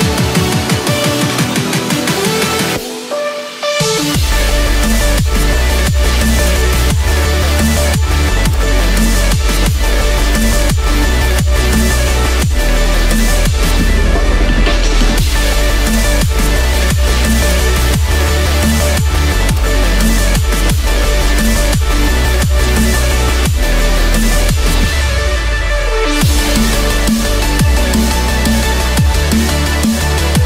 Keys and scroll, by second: 3.2 ctrl+z.